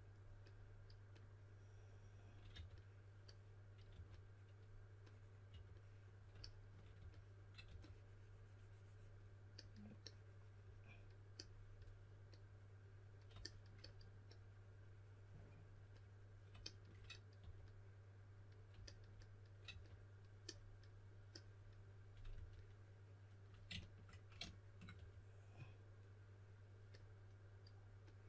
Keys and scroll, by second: 2.5 typing, 3.9 typing, 5.4 typing, 6.9-8.1 typing, 17.3 typing, 19.6 typing, 22.3 typing, 24.9 typing.